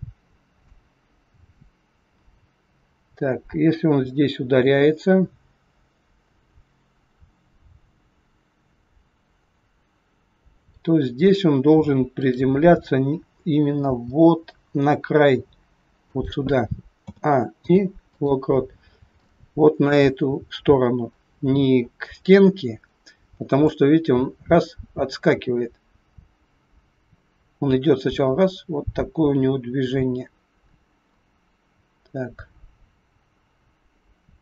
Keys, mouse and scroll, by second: 0.6 click, 12.2 click, 13.8 g, 17.0 a, 17.5 i, 18.8 scroll up 4, 19.1 shift+middle click, 23.7 click.